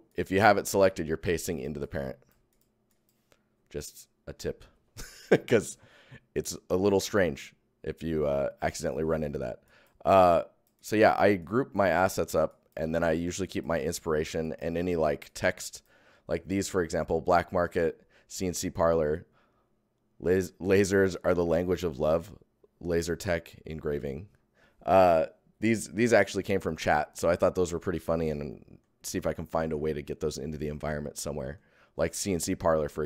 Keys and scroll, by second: 0.6 ctrl+Tab, 0.7 ctrl+v, 1.5 v, 1.5 Tab, 1.8 Tab.